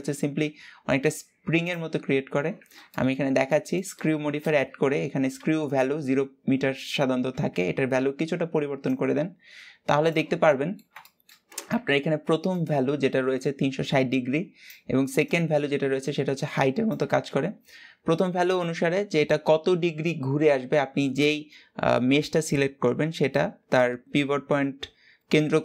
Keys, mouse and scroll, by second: 1.2-5.8 shift+middle drag, 7.1-8.7 drag, 8.7-15.6 middle drag.